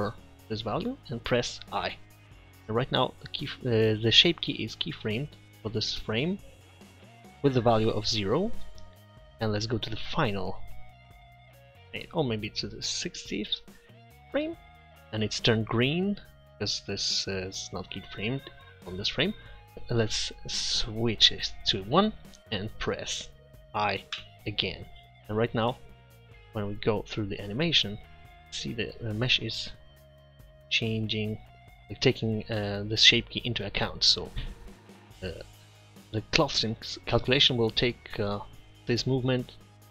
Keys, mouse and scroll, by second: 1.9 i, 10.1 click, 11.4-12.9 drag, 20.8-22.7 middle drag, 24.2 i, 26.4-27.5 drag.